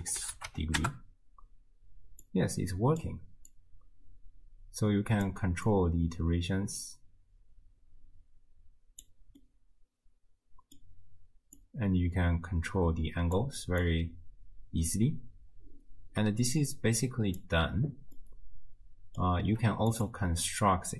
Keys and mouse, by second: 0.2 BackSpace, 2.2 click, 3.5-5.3 drag, 5.7-9.0 drag, 9.4-10.8 drag, 9.4-10.8 middle drag, 11.8-13.5 drag, 13.9-17.5 drag, 18.9 click, 20.1 middle click.